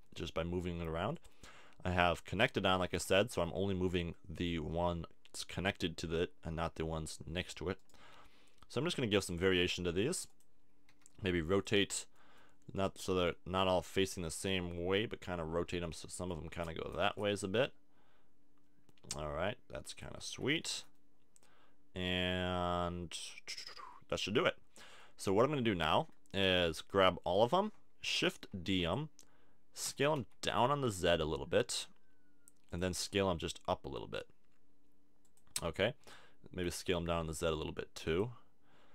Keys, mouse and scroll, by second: 1.0 click, 7.8 right click, 8.1 g, 9.3 scroll up 1, 10.9 r, 11.6 click, 12.1 middle click, 12.7 middle click, 14.2 r, 20.3 a, 20.4 Tab, 20.8-22.0 middle drag, 25.0-28.5 middle drag, 25.7 Tab, 26.4 a, 28.5 shift+d, 28.9-30.3 drag, 29.8 s, 32.8-34.6 drag, 33.0 s, 35.4-37.2 drag, 36.0 s, 37.2 click, 38.2-38.9 drag.